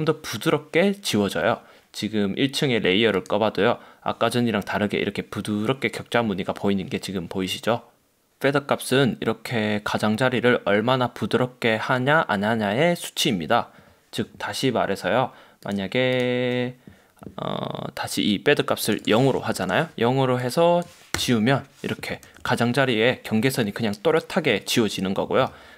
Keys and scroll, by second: 19.6 0, 19.7 Return, 21.3 BackSpace, 22.4 super+d, 25.6 super+z.